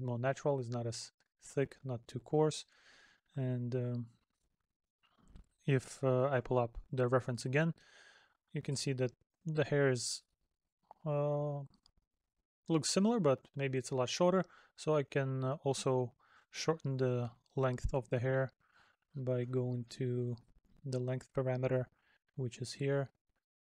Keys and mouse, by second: 14.6 middle click.